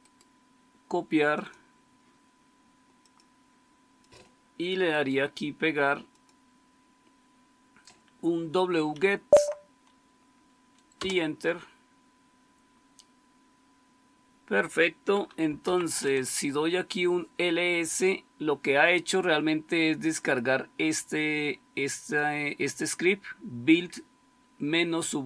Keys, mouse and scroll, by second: 8.8 Right, 10.9 Return, 15.2-16.0 typing.